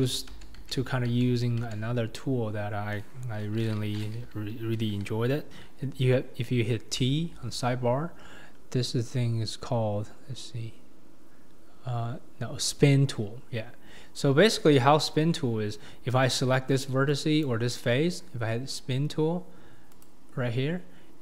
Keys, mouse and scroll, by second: 0.3 ctrl+z, 0.6 ctrl+z, 1.1 ctrl+z, 1.6 ctrl+z, 7.1 t, 14.3-15.3 scroll down 2, 15.3-15.9 scroll down 6, 15.9-16.5 scroll up 5, 16.5-17.1 scroll up 5, 17.1 scroll up 1, 17.4 click, 20.0-21.2 drag.